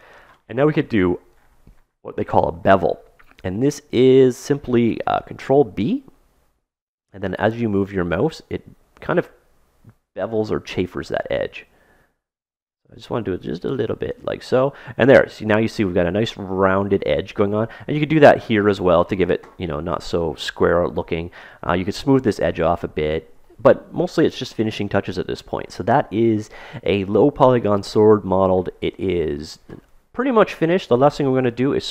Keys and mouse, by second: 5.5 ctrl+b, 14.4-16.4 middle drag, 19.3-25.1 middle drag, 25.3-27.8 middle drag, 31.5-31.9 middle drag.